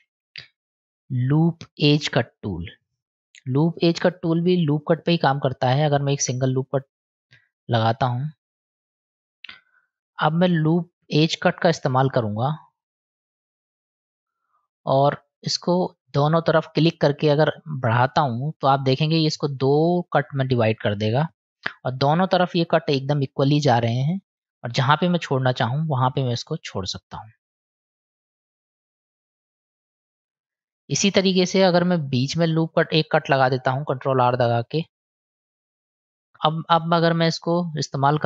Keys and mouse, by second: 2.4-4.8 drag, 6.0 middle click, 7.6 click, 8.8 click, 9.4-10.1 middle drag, 11.9 click, 13.0-13.9 drag, 15.5-26.3 drag, 27.2-30.3 middle drag, 34.7 ctrl+r.